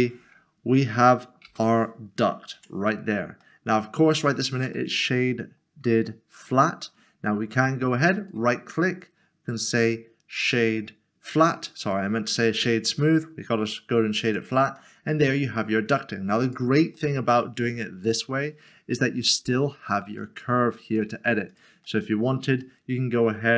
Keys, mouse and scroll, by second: 1.4 Return, 2.5 Tab, 3.6 middle click, 4.3-4.7 scroll down 1, 4.9 middle click, 6.5 click, 8.2 right click, 11.4 click, 14.3 click, 14.8 middle click, 16.4 click, 16.9 middle click, 17.6 scroll down 1, 18.2 middle click, 20.2 middle click, 20.9 click, 21.8 click, 22.0 middle click.